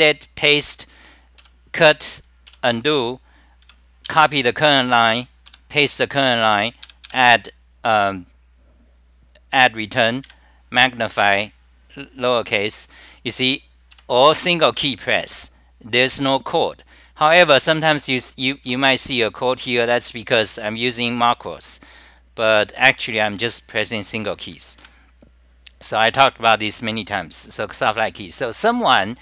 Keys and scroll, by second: 0.0-1.4 typing, 2.5 f, 3.7 c, 4.1 j, 4.7 t, 4.9 t, 5.1 Return, 15.2 w, 24.5 ctrl+g, 24.9 super+r.